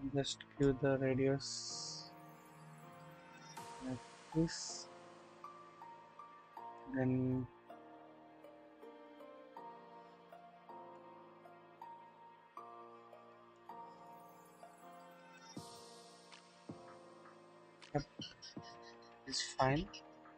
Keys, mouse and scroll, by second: 0.6-3.6 drag, 4.7-6.7 drag, 8.4-10.9 drag, 11.8-13.7 drag, 14.7-17.9 drag, 18.1-18.7 scroll down 1, 18.7-20.3 drag.